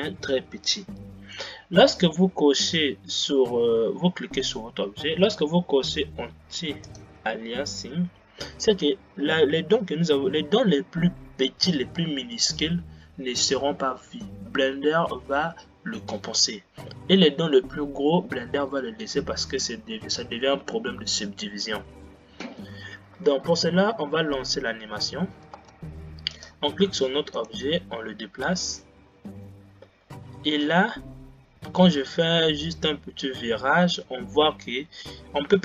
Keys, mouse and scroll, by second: 2.7 drag, 7.0 click, 12.2 scroll down 2, 23.4 Left, 25.7 space, 26.4 click, 27.6 g.